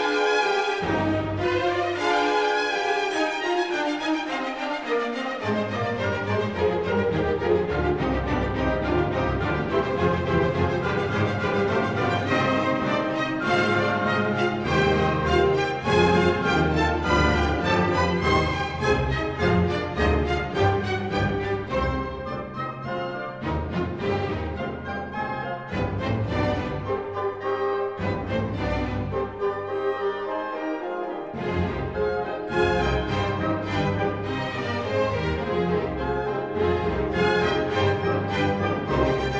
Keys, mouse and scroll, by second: 1.1-2.2 right drag, 2.8-4.0 drag, 4.5-5.5 middle drag, 4.5 scroll, 5.8-6.9 drag, 7.2 s, 8.4-9.5 drag, 11.0 click, 11.7 q, 13.9 click, 15.9 click, 17.4 click, 18.0 right click, 19.5 click, 21.1 click, 21.9 space, 23.3 click, 24.2 s, 26.1 click, 27.6-27.9 scroll down 2, 29.0 click, 32.4 click, 36.2 click, 37.1 click, 37.5-38.1 scroll, 38.7 ctrl+scroll.